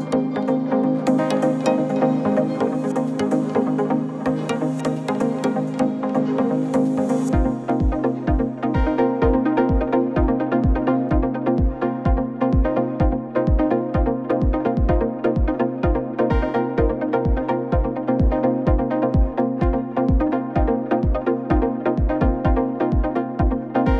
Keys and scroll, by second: 0.9 shift+Right, 1.1 shift+Left, 1.6 Up, 1.8 Right, 3.5 Left, 5.6 Up, 5.7 Left, 5.9 Up, 6.0 Left, 6.4 Right, 9.0 Left, 10.7 Up, 10.8 Left, 14.7 Right, 16.0 ctrl+0, 23.4-23.9 typing.